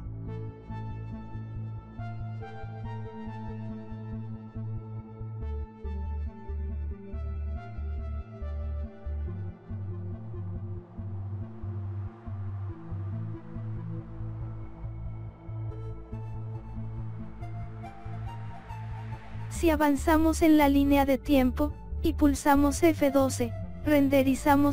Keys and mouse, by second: 2.8 s, 5.6 x, 7.0 click, 8.9 right click, 9.8 right click, 10.5 click, 12.7 click, 14.5 click, 16.4 click, 17.2 click, 23.0-24.2 drag.